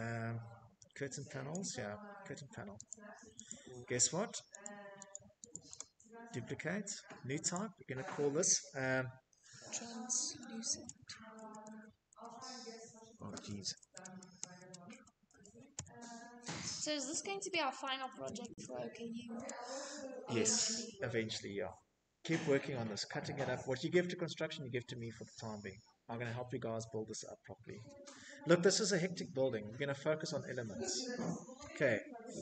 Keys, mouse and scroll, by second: 0.2 click, 0.8 click, 1.9 click, 2.4 click, 2.8 click, 3.0 right click, 4.8 click, 7.7-17.1 typing, 30.8 right click.